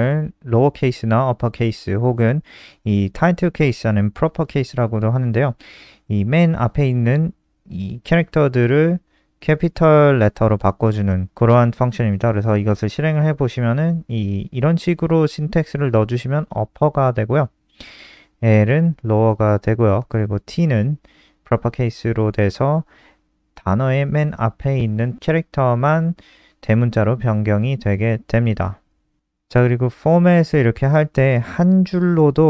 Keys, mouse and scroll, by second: 6.3 ctrl+click, 7.7 ctrl+click, 11.6 click, 12.0 ctrl+s, 12.3 F5, 18.5 click, 32.1 End, 32.3 shift+Home.